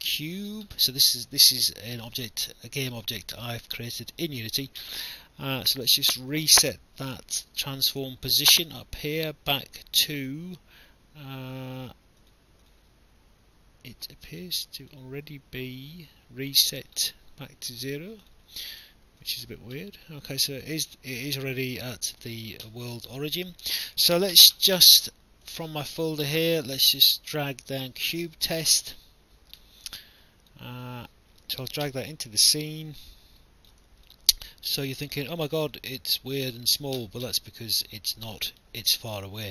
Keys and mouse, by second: 0.1 click, 8.7 click, 12.2 click, 14.8 click, 18.2 click, 23.2 alt+click, 25.5 click, 27.9 click, 30.1 click, 32.9 click, 34.1 alt+click, 35.7 alt+click.